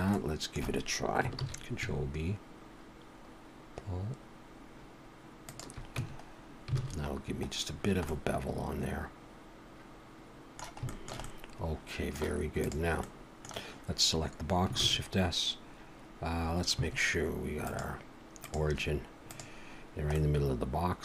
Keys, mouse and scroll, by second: 0.1 middle click, 1.4 ctrl+b, 6.0 Tab, 6.3-6.7 scroll down 1, 6.8 alt+a, 7.1-8.1 scroll down 5, 8.1 middle click, 10.9 shift+middle click, 11.2 middle click, 12.6 click, 13.0 middle click, 14.8 shift+s, 17.7 click, 20.2 middle click.